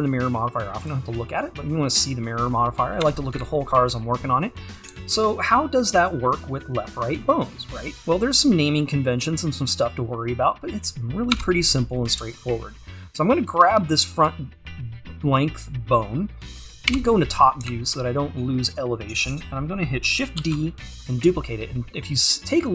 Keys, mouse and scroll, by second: 0.9-2.6 drag, 2.6-3.1 scroll up 1, 3.1 Tab, 3.4 `, 4.0-4.5 scroll down 1, 4.9 `, 11.4 Tab, 12.2 click, 16.9 KP_7, 20.4 shift+d.